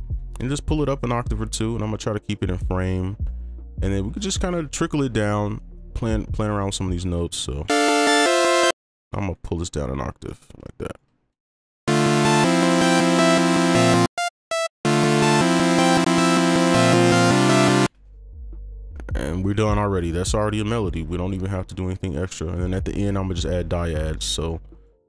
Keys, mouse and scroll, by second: 2.5-3.2 scroll down 1, 3.2 right click, 5.7 ctrl+click, 6.8 shift+click, 8.7 space, 9.0 ctrl+a, 10.2 right click, 10.8 ctrl+click, 11.8 space, 14.0 space, 14.8 space, 17.8 space, 18.9 space, 19.1 ctrl+click, 19.9 shift+click, 22.5 right click, 22.9 ctrl+click.